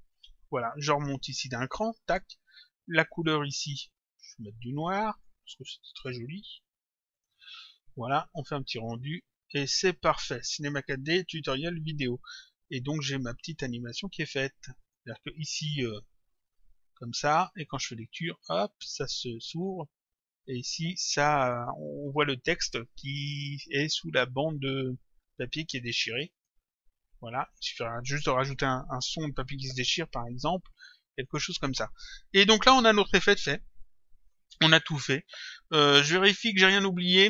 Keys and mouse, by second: 0.1 click, 1.5 click, 3.1 click, 6.0 click, 7.2 click, 8.4 click, 13.5 click, 17.7 click, 18.8 click, 20.0 click, 26.4 click, 27.6 click, 31.2 click.